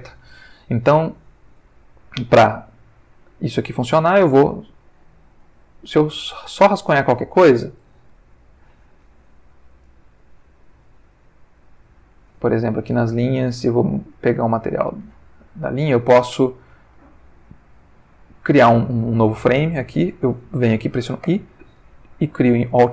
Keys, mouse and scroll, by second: 5.4 click, 6.2 click, 8.2 ctrl+z, 10.2 click, 11.9 click, 14.0 click, 14.7 click, 17.2-18.2 middle drag, 21.2 i, 22.7 click.